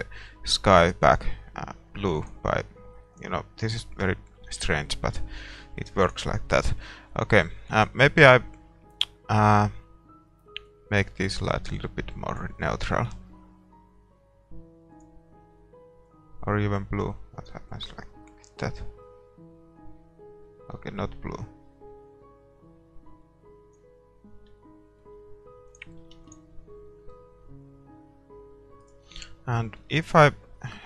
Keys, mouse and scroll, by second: 3.1-4.9 drag, 3.6-13.1 middle drag, 4.6 shift+z, 6.1-13.1 right drag, 13.1 shift+z, 15.0-16.8 drag, 24.6-26.6 middle drag, 25.7-28.8 drag, 26.4 ctrl+s, 28.8-30.8 right drag.